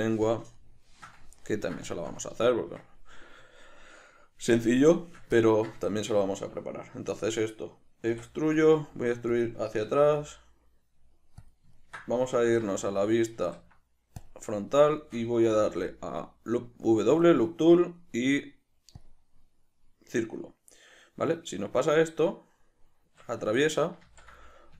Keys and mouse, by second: 8.1 e, 9.4 click, 9.8 s, 11.5 click, 11.8-24.7 ctrl+middle drag, 12.4 alt+q, 15.5 w, 24.0 ctrl+z.